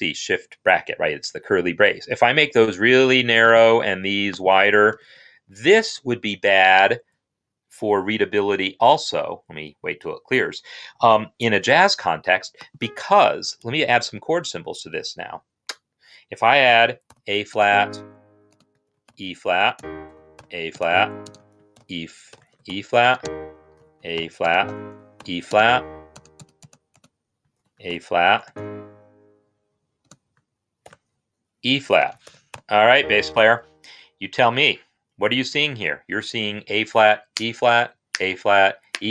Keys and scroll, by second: 4.7 shift+], 4.8 shift+], 5.4 shift+], 5.8 Escape, 6.6 Escape, 13.9 ctrl+k, 16.6-20.2 typing, 21.6-22.4 typing, 23.6 typing, 25.5-32.6 typing.